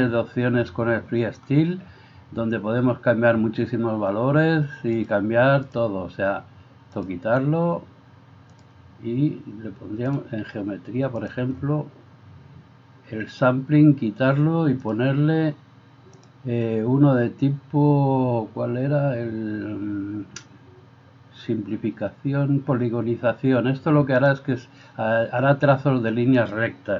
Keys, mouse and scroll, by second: 5.1 click, 7.1-10.2 drag, 11.2-26.6 drag.